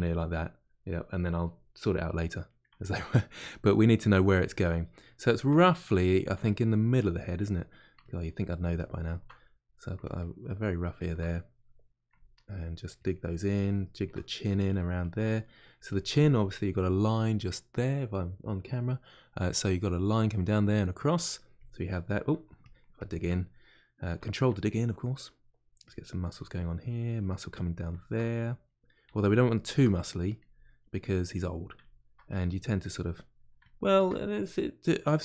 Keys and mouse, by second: 3.5 click, 4.3-6.5 middle drag, 6.5 click, 7.2 middle click, 8.0-9.4 ctrl+drag, 9.4 middle click, 10.0-11.3 ctrl+drag, 11.3 middle click, 12.1-14.2 ctrl+drag, 14.2 middle click, 14.7 ctrl+click, 15.4 middle click, 15.8-23.4 ctrl+drag, 23.4-25.8 middle drag, 25.8 click, 26.3 middle click, 27.2 click, 27.8-29.1 shift+middle drag, 29.1 shift+click, 29.8 middle click, 30.4 click, 30.8-32.3 middle drag, 32.3 click, 33.1 middle click, 33.6 ctrl+click, 34.5-35.2 middle drag.